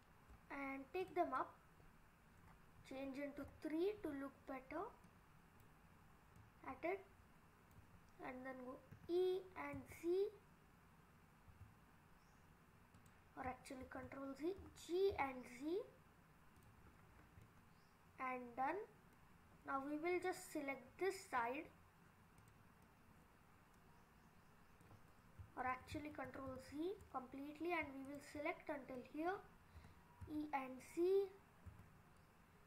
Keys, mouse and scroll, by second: 1.4 middle click, 3.4 KP_3, 5.1 click, 6.4 click, 8.0-9.0 scroll up 4, 9.0 e, 13.9 ctrl+z, 14.6 g, 16.8-17.4 scroll down 9, 17.4 middle click, 19.4-20.0 scroll up 4, 20.0 scroll down 1, 20.3 middle click, 22.4 click, 22.9 middle click, 24.8 middle click, 25.7 ctrl+z, 26.0 ctrl+z, 26.3 ctrl+z, 26.5 ctrl+z, 28.1 ctrl+click, 29.0 middle click, 29.8 e.